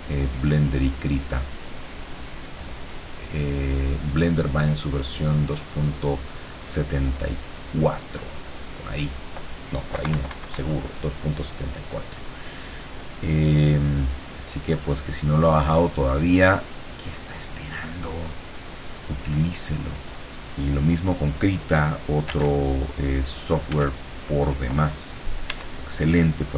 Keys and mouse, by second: 7.1-8.2 drag, 8.7 click, 10.0 KP_Subtract, 11.7 middle click, 12.4 click, 13.0-14.0 middle drag, 14.0-20.0 drag, 22.4 f, 23.8 f, 25.6 e.